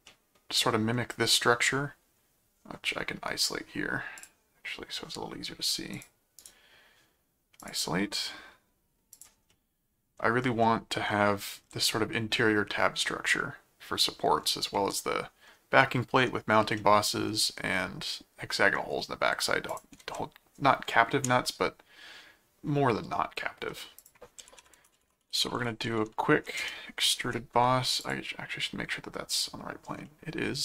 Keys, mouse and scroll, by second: 0.1 middle click, 4.2 click, 5.9 click, 6.4 right click, 7.6 click, 9.1 click, 9.5 middle click, 10.6 middle click, 14.7 middle click, 16.7 middle click, 19.7 ctrl+click, 20.1 ctrl+Tab, 24.0 click, 24.1-26.0 typing, 26.6 Return, 28.0 click, 29.3 click, 30.1 middle click.